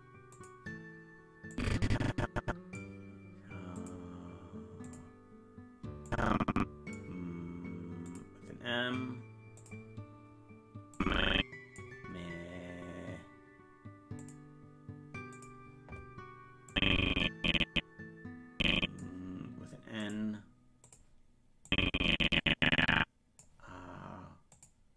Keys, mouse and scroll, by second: 0.3 click, 1.5-2.8 drag, 3.7 click, 4.8 click, 6.1 click, 8.0 click, 9.6 click, 10.9 click, 14.2 click, 15.3 click, 16.7-19.0 drag, 20.0 click, 20.8 click, 21.7-23.4 drag, 24.5 click.